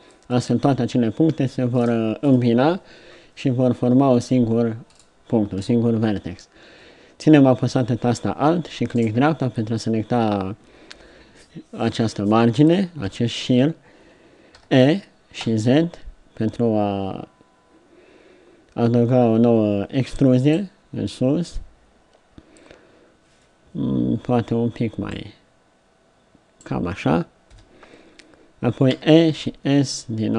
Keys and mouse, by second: 0.3-4.9 drag, 13.1 KP_3, 14.6 e, 25.1-27.0 drag, 27.5 KP_7, 28.9 e.